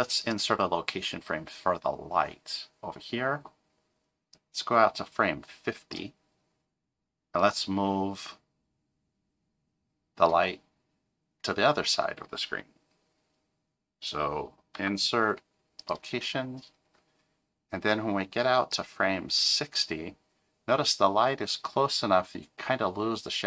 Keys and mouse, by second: 4.3-5.9 drag, 7.4-10.3 drag, 14.7 i, 18.7-19.5 drag.